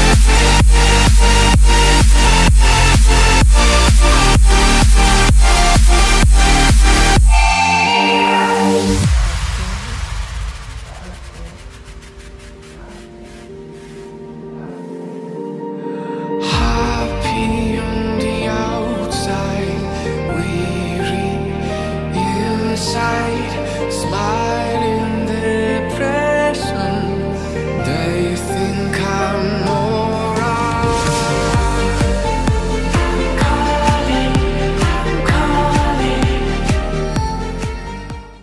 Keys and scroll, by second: 26.3 Delete.